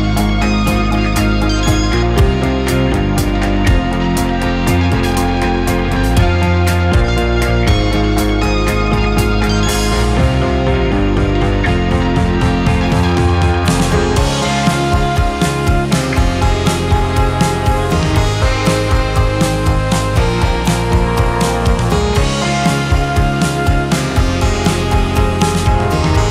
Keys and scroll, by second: 0.3 2, 1.7 shift+q, 16.3 shift+q, 16.7 shift+2, 17.7 space.